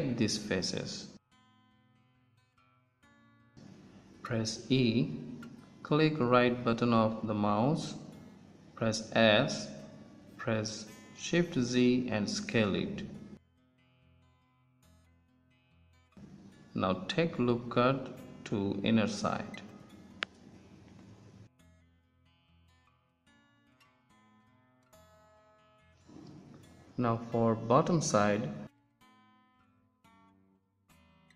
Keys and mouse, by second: 3.5-5.9 middle drag, 5.9 e, 9.1 s, 13.3 Tab, 16.2 Tab, 17.8 ctrl+r, 21.9 Tab, 24.4 KP_1, 29.9 KP_1, 30.5 z.